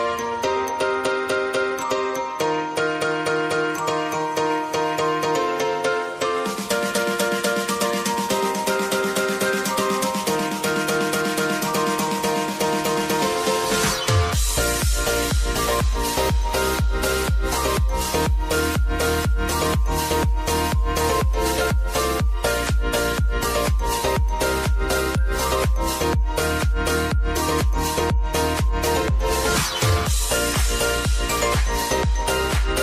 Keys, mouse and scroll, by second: 1.6 ctrl+alt+Home, 3.4 click, 8.3 v, 9.0-9.4 alt+scroll up 1, 9.8-19.5 drag, 19.5 Down, 21.1 click, 25.3 click, 27.1-28.3 typing, 29.5 ctrl+a, 30.3 click, 32.7 ctrl+alt+Home.